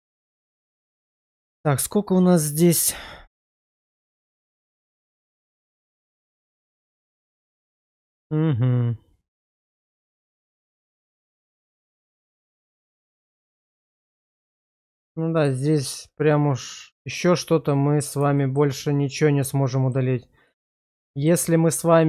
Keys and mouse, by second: 10.8 click, 11.5 /, 12.6-12.9 middle drag, 13.1 shift+middle drag, 13.5 Tab, 14.0 shift+middle click, 14.4-15.5 middle drag, 15.7 shift+middle click, 16.2-18.2 middle drag, 18.4 middle click, 18.9-19.9 middle drag, 21.1 shift+middle click, 21.9 middle click.